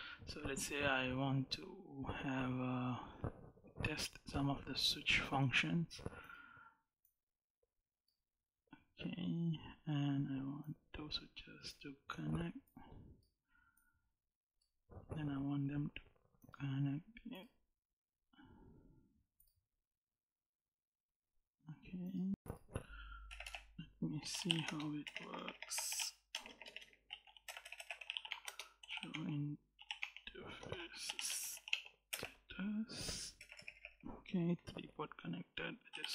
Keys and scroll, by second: 23.2 Return, 24.1-31.4 typing, 31.1 Tab, 31.5 Tab, 31.9 Return, 33.2 Return, 35.5-36.1 typing.